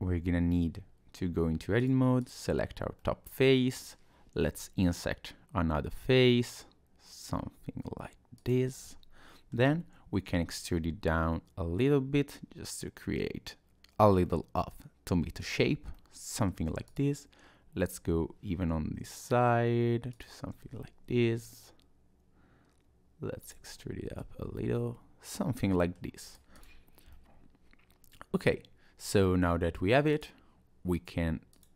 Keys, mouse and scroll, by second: 0.0 Tab, 1.8 click, 2.2 click, 3.0 middle click, 4.5 i, 8.8 middle click, 10.2 e, 14.3 middle click, 15.9 middle click, 16.9 click, 18.9 i, 21.2 e, 23.7 middle click, 24.3 Tab, 24.8 middle click, 26.2 right click, 27.1 middle click, 30.1 click, 31.5 click.